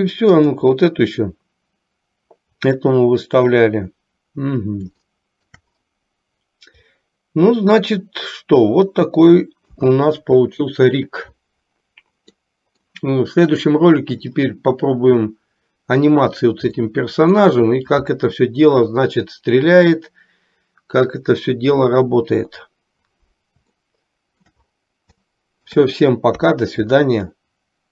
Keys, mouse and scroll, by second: 0.4 click, 5.1-5.8 shift+middle drag, 9.8 a, 12.5 middle click, 16.9-17.6 middle drag, 23.9-24.6 shift+middle drag, 25.5-25.9 shift+middle drag, 26.5 KP_3.